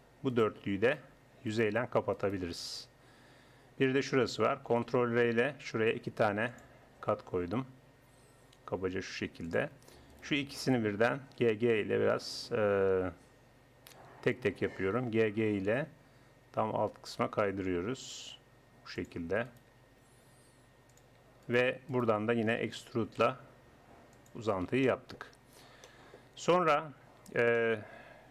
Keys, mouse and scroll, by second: 0.3-4.0 drag, 2.8 f, 4.9 ctrl+r, 10.1-11.4 drag, 11.4 g, 14.4 click, 15.2 g, 19.4 click, 19.7 g, 22.6 e.